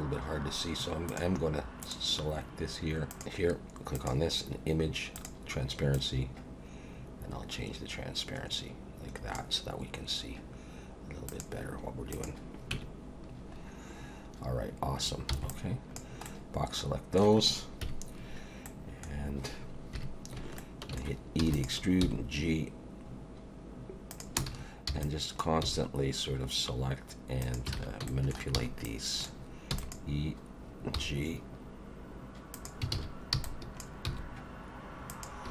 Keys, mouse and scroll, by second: 1.1 click, 1.8 click, 3.1 click, 3.2 Tab, 3.2 click, 4.0 click, 5.2 click, 6.0 click, 11.3 click, 12.1 click, 12.7 Tab, 13.5-14.4 scroll up 1, 15.3 b, 16.2 middle click, 17.8 KP_1, 18.6 middle click, 19.9 KP_1, 20.6 shift+middle click, 21.4 e, 22.0 g, 24.5 alt+a, 24.9 b, 25.6 g, 27.7 alt+a, 28.1 shift+middle click, 28.5 b, 29.7 e, 30.9 g, 32.9 alt+a, 33.3 b, 34.1 g.